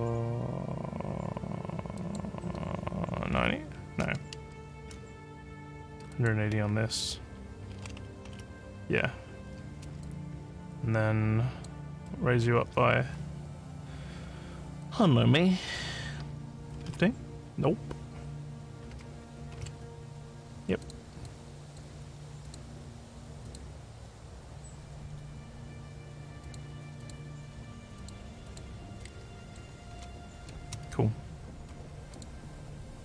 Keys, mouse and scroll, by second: 1.9 click, 4.4 ctrl+z, 6.1 click, 10.0-11.6 alt+drag, 12.1 alt+middle click, 14.8 click, 20.8 click, 21.2 alt+click, 22.4 click, 23.4 click, 26.4 click, 27.0 click, 28.0 click, 28.4 click, 29.4 click, 29.5-30.5 typing, 32.1 click.